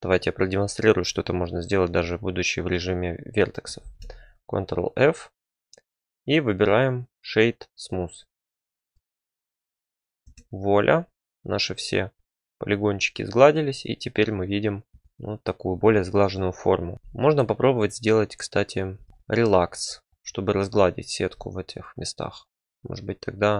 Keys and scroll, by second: 2.0 1, 3.8 ctrl+f, 10.2 Tab.